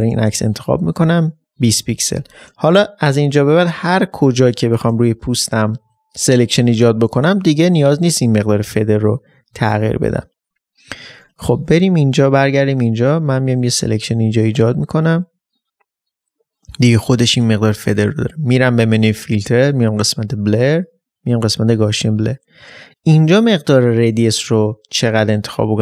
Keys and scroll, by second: 2.6 ctrl+d, 2.7 ctrl+space.